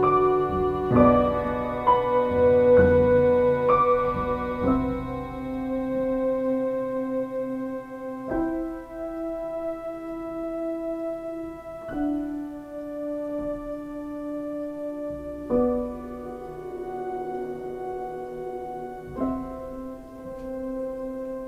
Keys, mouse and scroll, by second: 19.9 x.